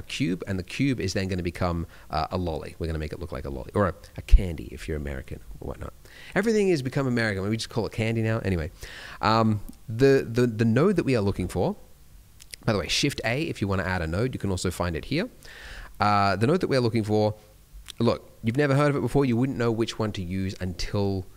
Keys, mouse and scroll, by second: 6.0 middle click, 12.4 shift+a, 14.4 click.